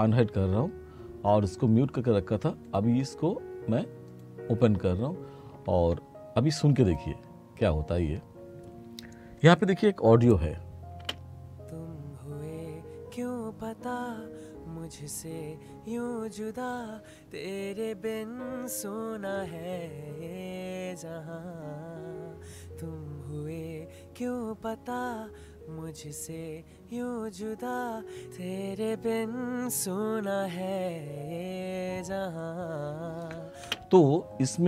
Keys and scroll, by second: 11.0 space, 33.7 space.